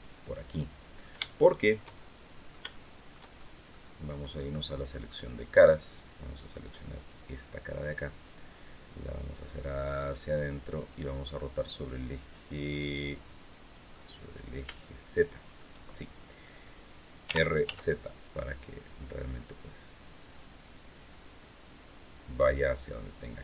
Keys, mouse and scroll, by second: 0.0 click, 0.3 middle click, 1.0 shift+middle click, 2.1 shift+middle click, 2.5 shift+middle click, 3.4 middle click, 4.6 click, 5.0 click, 6.3 right click, 6.7 right click, 7.1 click, 9.0-10.7 drag, 13.7 click, 17.0 r, 17.4 z, 20.0 click, 21.4-22.5 drag, 22.9-23.4 drag.